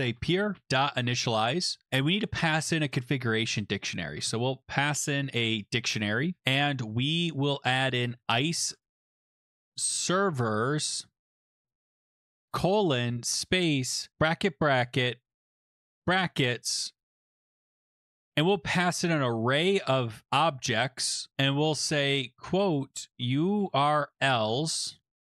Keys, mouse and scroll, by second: 0.0-1.5 typing, 3.9-4.6 typing, 6.3-10.7 typing, 11.3 Right, 12.2-16.1 typing, 17.8-20.2 typing, 22.1-25.2 typing.